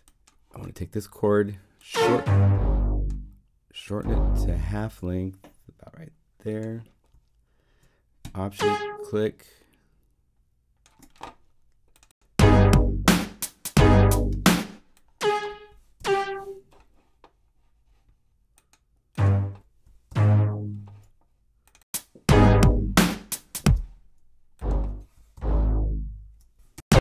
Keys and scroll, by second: 14.3 space, 15.9 alt+Down, 20.1 alt+Up, 23.5 space, 25.3 alt+Up.